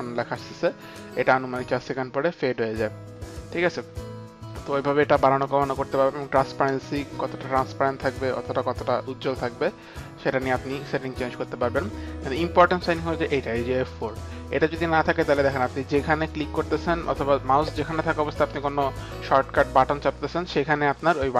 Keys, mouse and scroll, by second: 6.2 click, 8.2 click, 13.9 click.